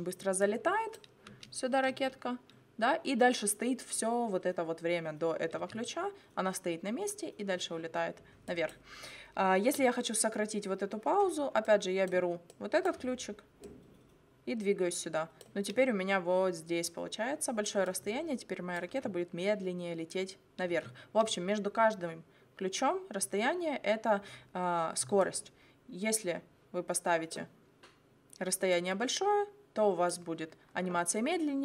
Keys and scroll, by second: 1.3 space, 5.6 space, 18.9 space, 20.7 space.